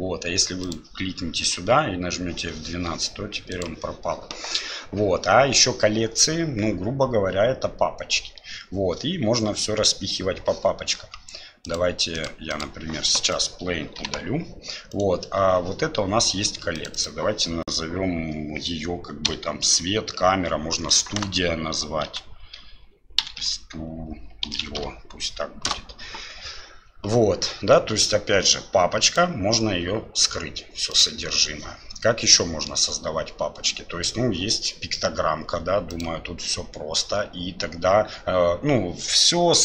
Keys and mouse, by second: 0.7 click, 1.6 F12, 12.5 click, 14.0 Delete, 16.8 click, 17.1-29.2 drag, 30.9 click, 32.3 middle click, 35.9 click.